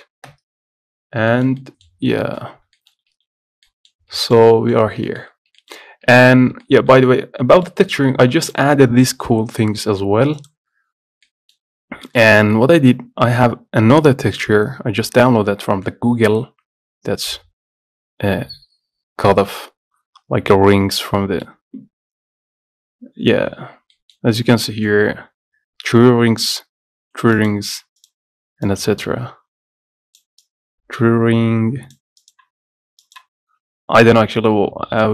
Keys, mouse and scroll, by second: 0.4-1.3 KP_0, 1.2 scroll up 1, 1.2 KP_0, 1.4-2.7 shift+middle drag, 2.7 scroll up 1, 2.9 shift+middle click, 3.2 z, 3.8 middle click, 4.2 scroll up 3, 4.6-6.4 shift+middle drag, 5.6 scroll up 2, 6.4-6.7 scroll up 1, 6.7-8.6 shift+middle drag, 8.6 click, 10.5-11.8 drag, 11.8-12.2 scroll up 1, 12.2 shift+middle click, 12.5-14.5 scroll down 1, 27.5-34.5 drag, 34.5 scroll up 4, 34.9-35.1 middle drag, 34.9-35.1 scroll down 1.